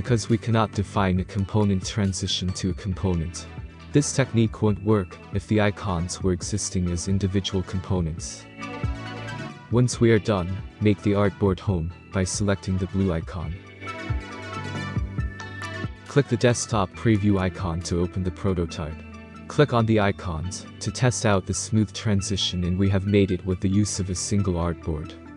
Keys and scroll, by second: 12.2 ctrl+3.